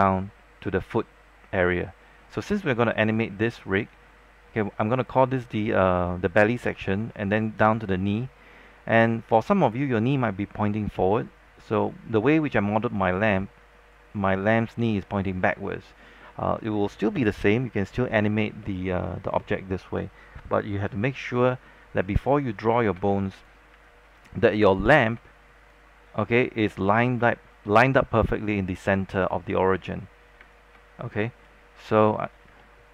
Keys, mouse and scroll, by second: 2.2-3.0 scroll down 1, 3.0 alt+middle click, 3.4 scroll up 1, 3.8 alt+middle click, 22.9 space, 23.0 click, 23.9-26.2 alt+drag, 25.1 space, 26.2 scroll down 1, 26.4 alt+middle click, 27.1 scroll down 1, 29.5 alt+middle click, 30.6 space, 31.6 click, 32.5 scroll down 1, 32.7 alt+middle click.